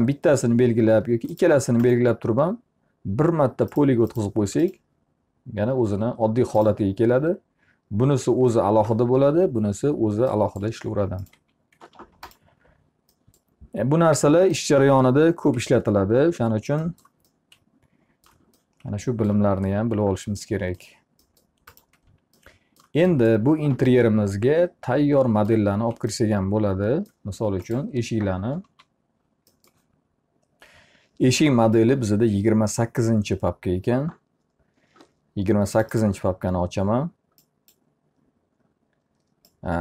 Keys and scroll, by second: 11.4 alt+r, 15.5 p, 16.3 z, 28.1 t, 28.7 z.